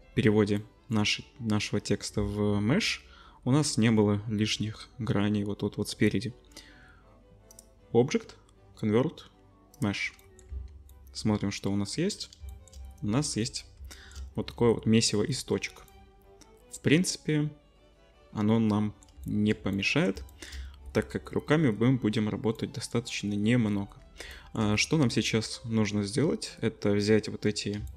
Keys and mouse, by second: 7.5-8.4 drag, 10.5 Tab, 12.5 shift+middle click, 12.8 click, 13.9-21.8 shift+drag, 22.7 click, 23.2 click, 23.7 click, 24.6-27.8 middle drag.